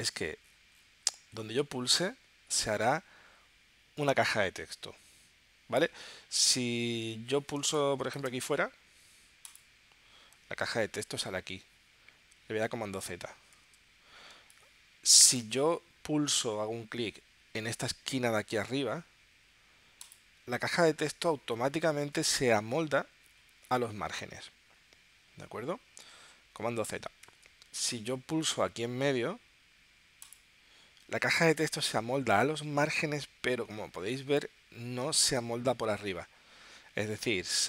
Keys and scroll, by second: 7.6 space, 14.3 space.